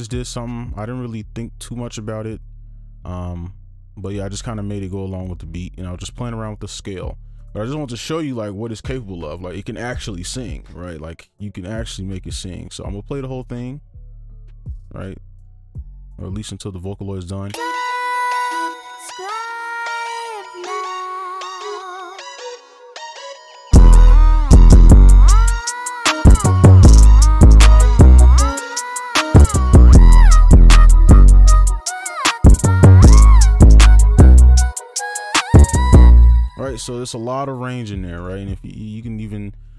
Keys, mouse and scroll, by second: 14.7 double click, 15.6 right click, 17.5 space, 21.3 double click, 36.0 space, 38.1 right click.